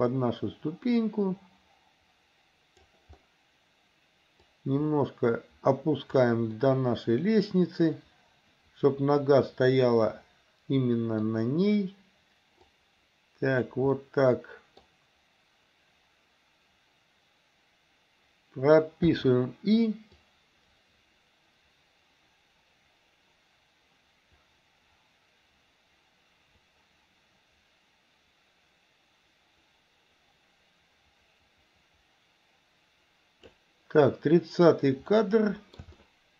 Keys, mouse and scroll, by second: 4.5-6.2 drag, 6.6-11.3 middle drag, 12.8-13.8 drag, 14.0-14.8 middle drag, 19.2 i, 20.2-33.6 drag, 35.2-35.9 middle drag, 36.0-36.3 shift+middle drag.